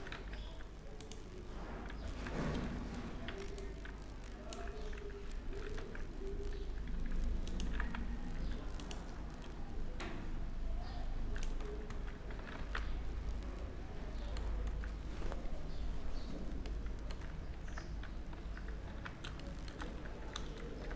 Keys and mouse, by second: 1.5 z, 2.2 a, 2.9 b, 5.2 e, 7.2 s, 9.6-11.4 drag, 11.4 z, 11.6 z, 12.0 z, 12.2 Tab, 17.2 ctrl+2, 18.2 Tab, 18.6 Tab, 20.2 Tab, 20.2 ctrl+r.